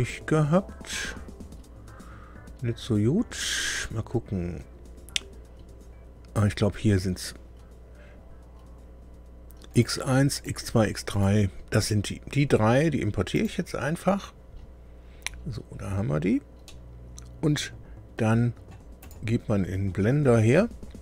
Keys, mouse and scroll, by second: 3.3 click, 9.7 click, 10.3 ctrl+click, 11.1 ctrl+click, 13.3 click, 15.2-16.3 scroll down 6, 16.6 click, 17.4 middle click, 19.0 right click.